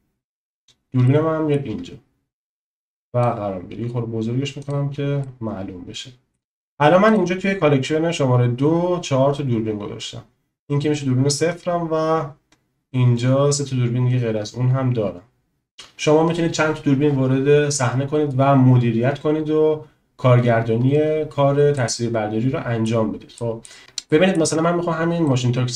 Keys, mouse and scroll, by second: 1.1 shift+middle click, 2.5 click, 3.8 s, 4.7 click, 5.3 shift+middle click, 5.5 click, 21.7 middle click, 22.1-22.9 drag, 23.4 click, 24.1 click, 24.1 middle click, 25.2-25.7 shift+middle drag.